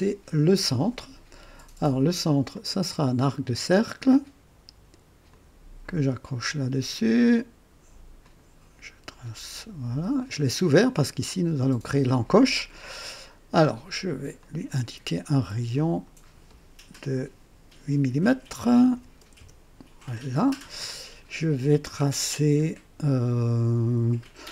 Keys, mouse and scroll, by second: 2.4 click, 5.2 click, 8.1 click, 10.1 click, 13.1 right click, 14.3 click, 15.7 click, 18.8 KP_8, 19.3 KP_Enter.